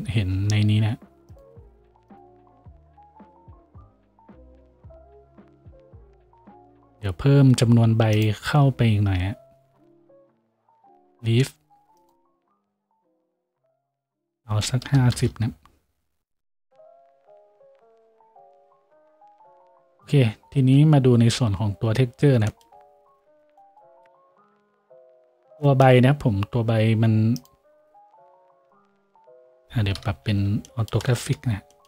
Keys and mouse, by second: 0.3 F6, 30.0 KP_5.